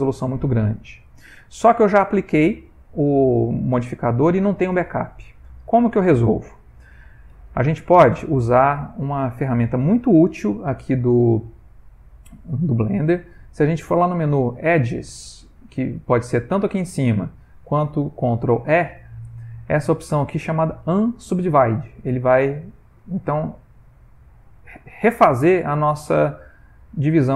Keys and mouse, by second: 0.2 middle click, 0.7 shift+middle click, 4.8 middle click, 5.5 middle click, 6.6 middle click, 7.5 a, 8.4 shift+middle click, 8.5 shift+middle click, 9.1 ctrl+middle click, 14.1 click, 18.6 ctrl+e.